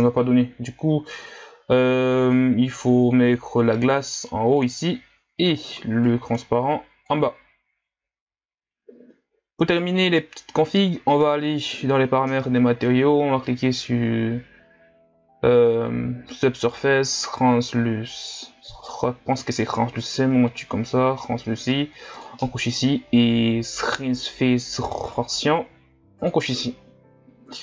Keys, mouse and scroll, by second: 4.7 click, 7.2-8.4 drag, 8.4-8.8 scroll down 2, 10.2 click, 19.8-22.3 drag, 26.2 click.